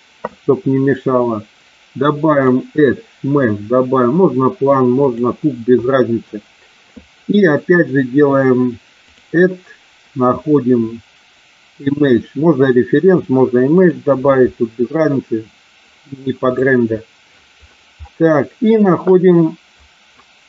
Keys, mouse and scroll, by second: 2.4-5.3 drag, 9.1-14.1 drag.